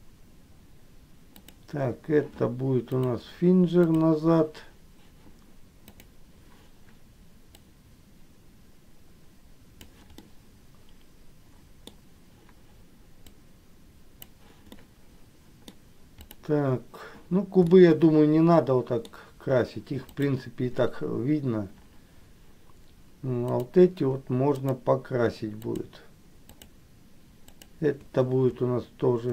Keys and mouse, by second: 3.2-4.3 drag, 6.2 click, 7.8-10.0 drag, 10.4-12.0 middle drag, 13.7 click, 15.0 middle click, 17.9-19.3 middle drag, 20.2 click, 23.6 click, 24.7 shift+click, 25.8 shift+click.